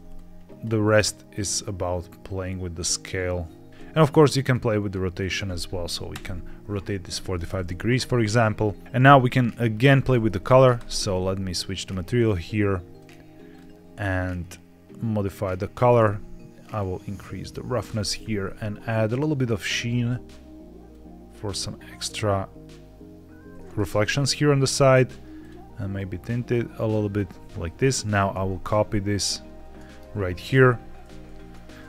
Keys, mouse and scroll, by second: 0.0 shift+click, 0.7-3.7 shift+drag, 3.7 ctrl+z, 4.4 click, 5.1-6.1 drag, 8.5 scroll down 2, 8.8 ctrl+shift+click, 8.9 middle click, 9.4-10.2 scroll down 2, 10.2 scroll down 1, 10.6 ctrl+shift+click, 11.4-12.0 scroll up 2, 12.0 click, 12.8 click, 16.7-17.7 drag, 19.5 click, 20.8-23.5 drag, 25.3 click, 28.2 ctrl+c, 29.3 ctrl+v, 30.4 ctrl+v, 31.2 ctrl+z.